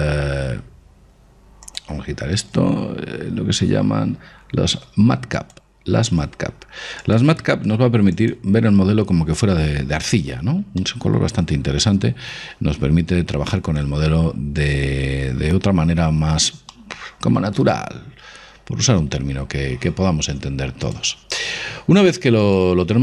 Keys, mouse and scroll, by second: 1.8-3.6 drag, 5.5-9.0 drag, 9.0-12.8 middle drag, 16.8-18.5 middle drag.